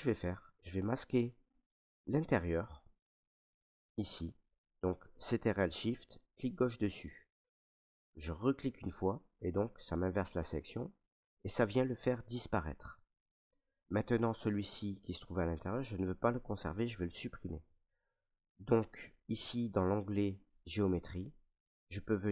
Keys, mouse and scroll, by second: 0.2 right click, 0.9 right click, 1.8 right click, 2.4 ctrl+right click, 3.0 alt+right click, 6.3 click, 8.5 click, 11.7 right click, 12.5 ctrl+right click, 13.3 right click.